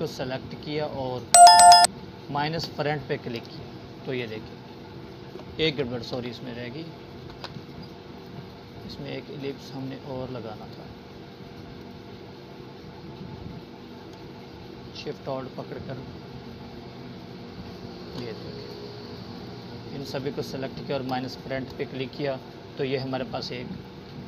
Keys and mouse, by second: 1.7 ctrl+z, 3.4 ctrl+shift+z, 4.3 click, 6.7 right click, 8.0 click, 10.7-14.5 alt+shift+drag.